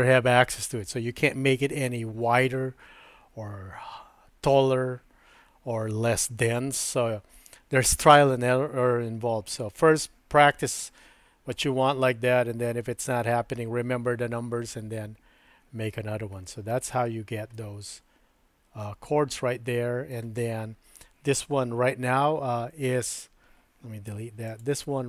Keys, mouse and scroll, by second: 17.5-20.3 middle drag, 22.4 Tab, 22.9 Tab, 24.1 Delete, 24.5 click.